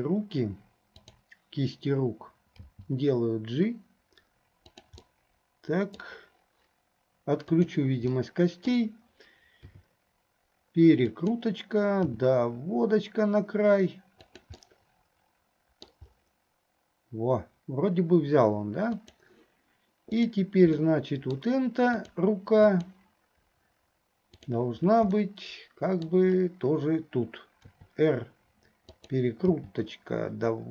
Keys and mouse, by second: 1.1 click, 4.9 g, 5.3-6.3 middle drag, 7.7 click, 8.3 middle click, 14.8-15.8 middle drag, 15.8 click, 15.8 right click, 19.2 click, 20.2 click, 21.0 middle click, 22.2 click, 22.9 click, 24.5 click, 25.3 middle click, 27.7 r, 29.7 g.